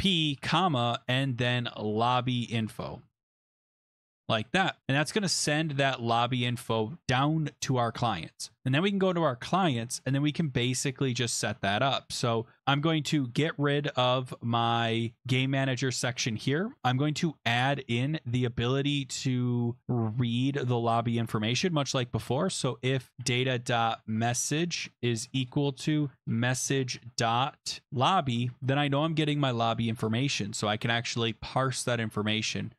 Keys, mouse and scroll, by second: 0.0-3.8 typing, 4.1 Down, 4.3 Return, 4.8 ctrl+s, 8.9 click, 9.8-10.4 scroll down 4, 10.6-11.3 scroll up 2, 11.3-12.6 scroll down 1, 12.6 click, 13.2 shift+3, 14.0 BackSpace, 14.6 BackSpace, 14.9 scroll, 15.5 shift+3, 17.5 click, 17.5 #, 18.1 Page_Up, 19.0 scroll, 19.6 click, 20.1 middle click, 20.7 click, 21.3 Return, 21.4 Return, 21.5-30.4 typing, 29.3 Tab.